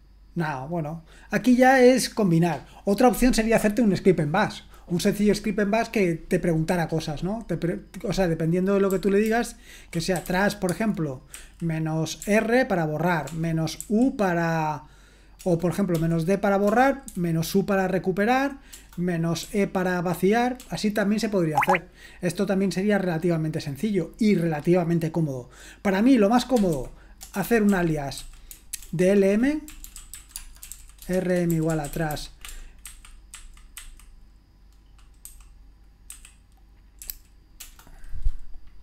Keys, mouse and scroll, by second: 8.9-12.2 typing, 13.3-17.1 typing, 18.7 BackSpace, 19.4 e, 20.6-21.7 BackSpace, 26.3-32.6 typing, 37.0 typing.